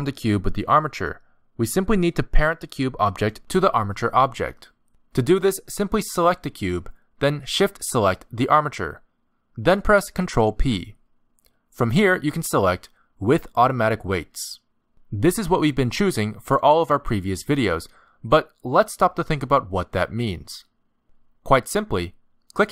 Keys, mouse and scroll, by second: 3.1 click, 6.1 shift+click, 10.4 ctrl+p.